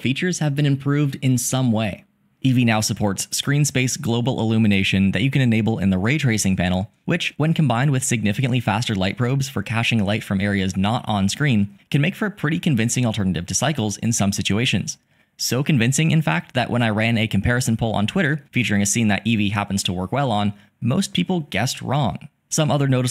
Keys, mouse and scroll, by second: 4.6 click, 7.0 r, 7.2 z, 22.7 g.